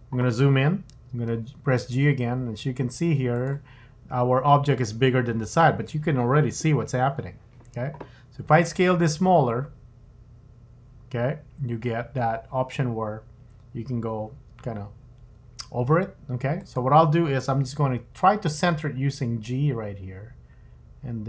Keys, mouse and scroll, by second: 0.9 g, 9.0 s, 17.8 g.